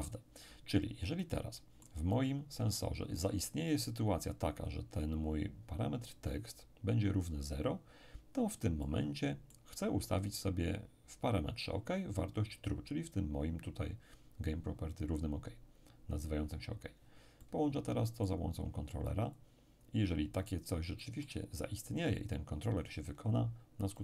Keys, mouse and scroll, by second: 1.2-3.7 middle drag, 8.8-10.5 middle drag, 17.4-18.4 middle drag, 18.4-19.4 scroll down 1, 19.4-23.0 drag, 21.0-23.0 middle drag, 23.6-23.9 scroll down 1, 23.9-24.0 middle drag.